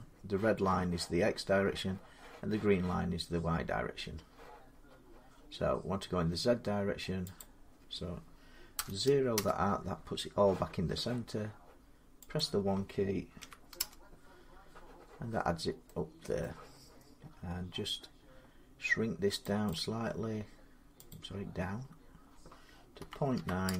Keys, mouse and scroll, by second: 7.2 click, 8.5 typing, 9.1 Return, 12.2 click, 12.2-13.6 typing, 16.2 middle click, 16.9 typing, 19.2 click, 19.5 click, 20.9 click, 22.8-23.5 typing.